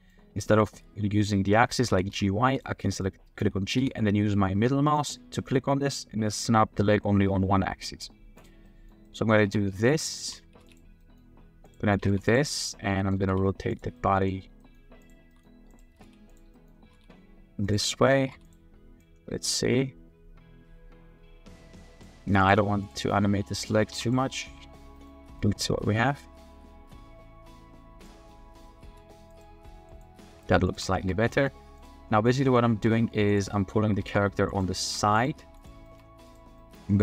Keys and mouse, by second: 0.4 click, 1.9 g, 2.1 y, 2.8 click, 3.8 g, 4.9 click, 8.6 drag, 9.0 middle drag, 9.4 g, 10.1 middle drag, 10.5 r, 10.5 z, 11.0 middle drag, 11.6 click, 11.9 r, 12.0 z, 13.0 click, 13.1 r, 13.2 z, 13.9 click, 14.6 click, 15.2-16.9 typing, 16.5 click, 17.9 drag, 18.1 middle click, 18.2 r, 18.3 z, 19.0-22.0 drag, 22.4 click, 22.8 click, 23.5 click, 23.9 x, 24.9 click, 25.6-28.1 drag, 28.3-28.6 drag, 28.9 r, 29.3 z, 30.1 r, 30.2 z, 30.9 shift+middle drag, 31.3 middle click, 31.8 middle click, 32.2 drag, 32.3 middle drag, 32.4 click, 32.8-35.5 typing, 33.5 middle click, 35.8 shift+middle click, 36.6 middle click.